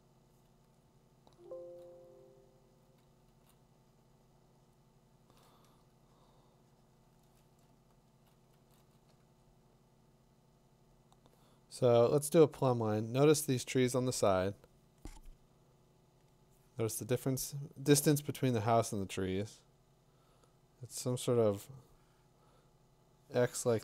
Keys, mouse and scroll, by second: 1.3 [, 3.0 [, 3.3 [, 7.5-8.2 [, 8.6 [, 8.8 [.